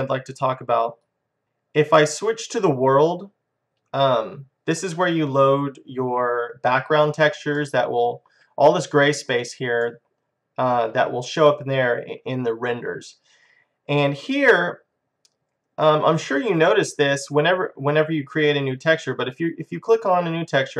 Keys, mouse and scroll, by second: 1.1 click, 3.3-4.5 drag, 7.6 middle click, 8.1-13.5 middle drag, 19.7-20.7 drag.